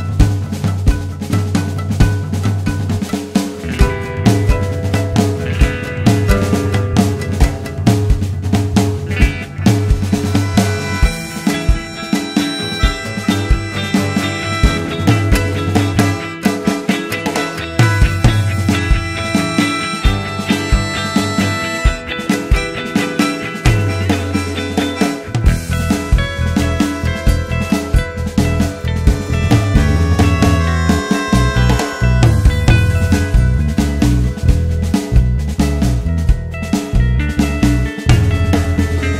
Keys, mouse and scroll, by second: 1.0 shift+click, 1.7 g, 4.0 ctrl+z, 4.7 ctrl+click, 5.5 g, 8.2 Tab, 10.2 Tab, 10.4 `, 13.4 alt+a, 13.8 click, 14.6 g, 15.5 click, 16.0 g, 16.7 g, 17.4 g, 17.9 Tab, 18.0-18.4 scroll down 1, 18.4 alt+a, 18.6 `, 19.0 scroll up 1, 20.2 scroll up 1, 20.4 Tab, 21.0 click, 21.6 alt+s, 24.4 click, 24.7 alt+s, 26.2 click, 26.6 alt+s, 28.0 `, 29.4 scroll down 2, 29.6 `, 30.6 `, 31.4 scroll up 1, 31.6 Tab, 32.4-32.9 scroll up 1, 32.9 ctrl+r, 34.2 click, 35.0 alt+s, 38.0-39.1 drag.